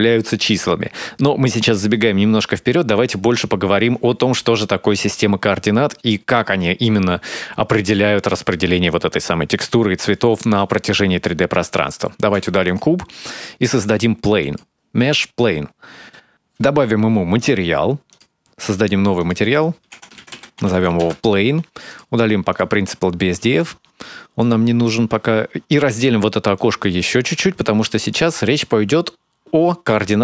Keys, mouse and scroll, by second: 12.6 middle click, 13.3 x, 14.4 shift+a, 18.3 click, 19.1 click, 20.2 click, 22.8 click, 23.5 click, 23.9 x, 24.5 click, 27.5 click.